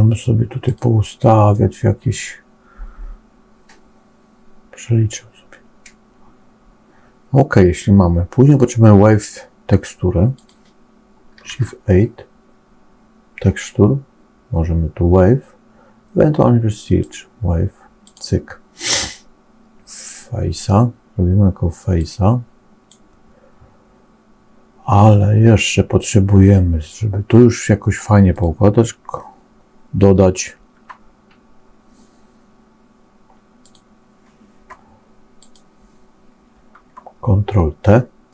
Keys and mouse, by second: 10.3 click, 21.8-22.9 drag, 28.2 click, 35.3 click.